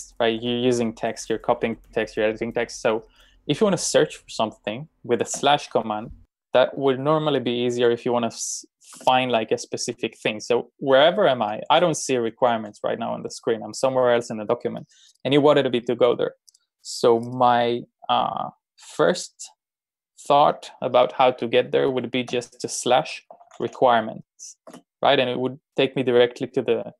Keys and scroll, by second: 5.4 /, 9.0 Return, 10.5 Return, 11.0 ctrl+j, 11.5 ctrl+j, 22.3-23.8 typing, 24.7 Return.